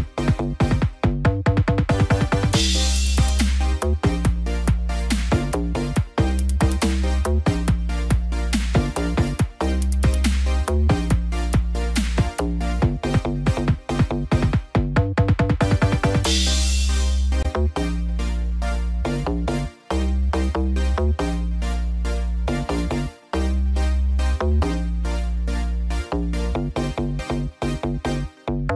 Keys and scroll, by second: 8.4 ctrl+0.